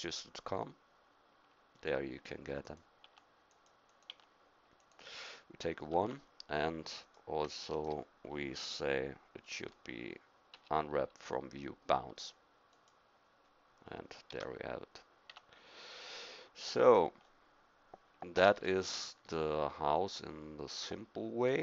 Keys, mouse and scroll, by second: 2.6-4.2 drag, 5.9 Tab, 8.5 KP_1, 10.5 u, 14.3 a, 15.3 Tab, 18.9 middle click.